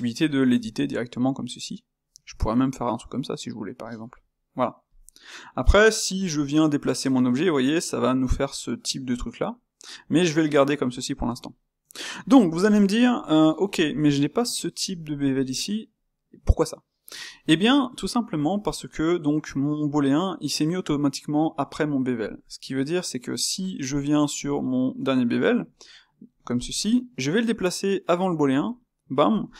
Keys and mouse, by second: 0.8 space, 5.0-6.2 middle drag, 6.2 g, 11.4-17.9 middle drag, 17.9 click, 24.6 space.